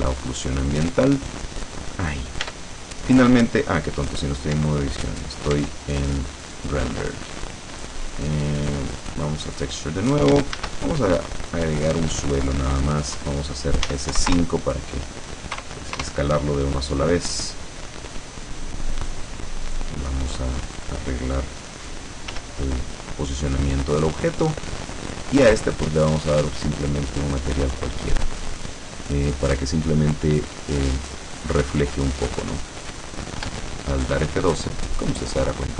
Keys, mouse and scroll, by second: 2.5 Tab, 4.7 Tab, 5.7 Tab, 6.7 click, 9.6 click, 10.7 shift+a, 11.5 click, 14.0 s, 14.2 KP_5, 14.4 KP_Enter, 16.1 KP_0, 18.6 click, 19.8-21.2 drag, 21.5 click, 22.4 s, 23.4 click, 26.2 middle click, 27.1 click, 27.7 click, 33.5 F12.